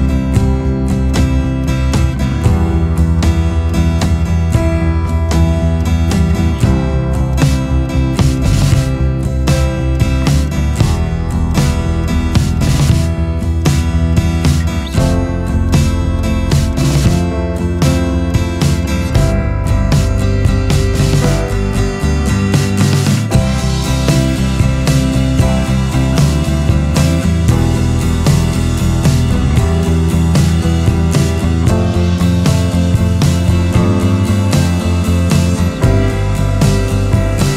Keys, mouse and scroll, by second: 12.1-12.7 scroll.